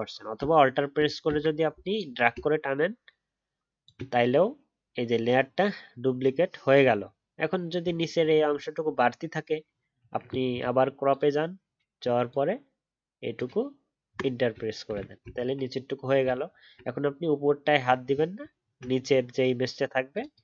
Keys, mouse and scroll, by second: 1.9 alt+click, 7.9-11.1 alt+scroll up 1, 15.3-16.3 alt+scroll down 1, 16.3 alt+scroll up 1, 18.6-19.0 alt+scroll up 1.